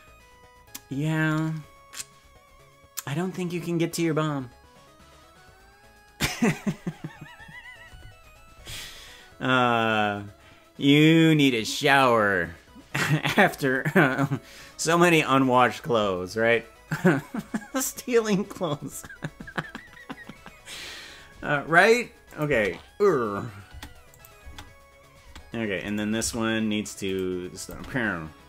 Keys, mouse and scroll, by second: 22.3 click, 22.6 space, 23.8 space, 24.1 click, 24.4 space, 25.4 space, 26.0 right click, 26.2 g, 27.6 click, 27.8 space.